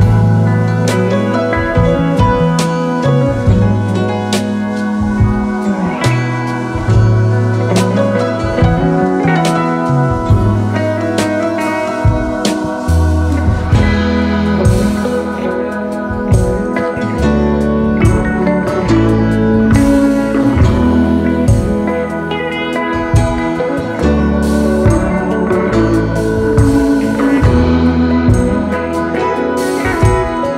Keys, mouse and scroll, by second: 0.1 space, 5.6 alt+scroll down 2, 5.9 space, 6.4 space, 10.5 alt+scroll up 3, 10.9 space, 11.3 space, 12.0 alt+scroll down 1, 12.2 space, 14.7 ctrl+x, 15.0 space, 15.8 alt+scroll up 2, 16.0 space, 18.1 Delete, 19.1 alt+scroll down 2, 21.1 right click, 25.3 right click, 26.9 double click, 27.8-28.9 space.